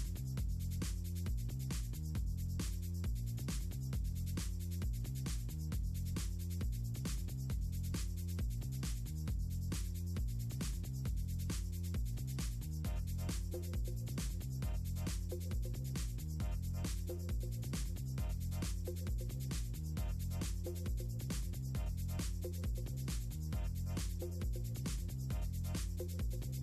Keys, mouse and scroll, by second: 1.1 click, 6.4 Caps_Lock, 7.5-8.4 typing, 9.4 click, 10.5 click, 10.6 click, 10.9 click, 11.0 click, 11.5 scroll down 2, 11.9 Left, 12.1 click, 12.3 click, 12.5 Left, 12.7 click, 13.1 click, 13.7 click, 14.7 scroll up 2, 15.1 click, 15.9 click, 16.3 click, 16.9 middle click, 17.4 click, 18.0 click, 18.7 click, 20.7 click, 20.9 click, 21.3 click, 22.3 a, 23.2 click, 23.4 click, 24.6 click, 25.1-26.5 scroll up 8.